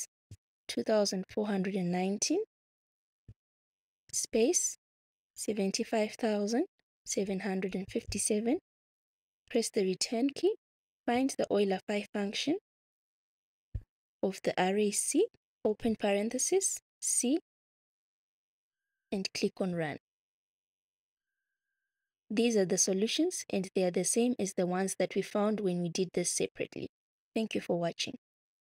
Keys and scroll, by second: 0.6-2.0 typing, 3.1 9, 4.0 space, 5.2 7, 5.7 5, 6.8-8.2 typing, 9.4 Return, 10.7-12.2 typing, 16.7 c.